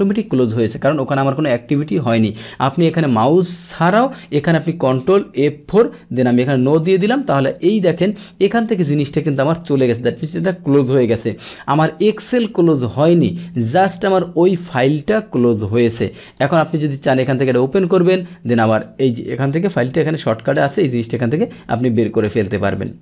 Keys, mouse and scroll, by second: 5.6 ctrl+F4, 14.6 click, 16.3 click, 17.1 click, 18.7 click, 21.7 click, 22.7 click.